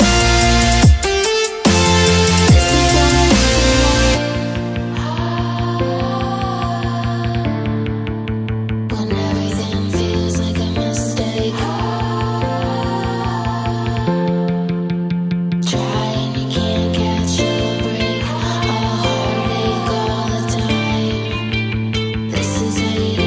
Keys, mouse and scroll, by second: 8.1 shift+p, 10.9-15.1 drag, 16.1-20.7 drag, 21.5 ctrl+scroll down 2.